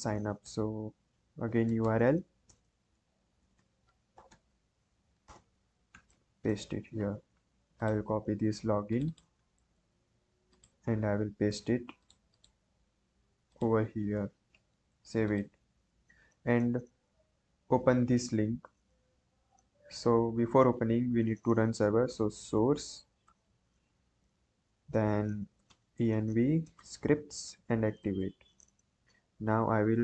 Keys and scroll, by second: 0.4-4.9 typing, 2.4 Return, 5.2 Return, 6.0 ctrl+v, 6.4 ctrl+s, 9.5 ctrl+c, 14.2 ctrl+v, 14.6 ctrl+s, 19.3 ctrl+`, 21.8-23.2 typing, 23.4 Tab, 25.5 e, 25.6 Tab, 26.6 s, 26.7 Tab, 26.9 a, 27.4 Tab, 27.9 Return.